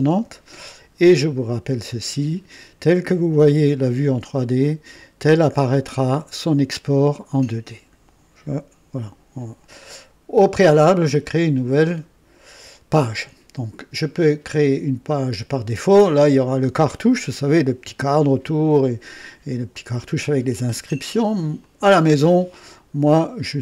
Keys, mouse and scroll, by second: 3.4-4.4 right drag, 21.5 click, 22.9 scroll down 2.